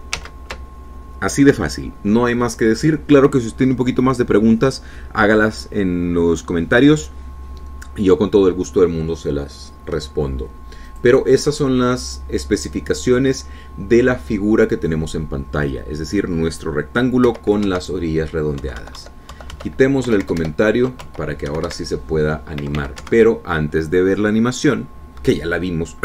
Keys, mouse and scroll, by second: 0.3 alt+Tab, 1.3 ctrl+z, 12.4 click, 18.8 Home, 19.2 Right, 20.2 Delete, 21.1 End, 21.6 BackSpace, 22.6 Home, 23.1 Right, 24.3 Left, 24.6 Right.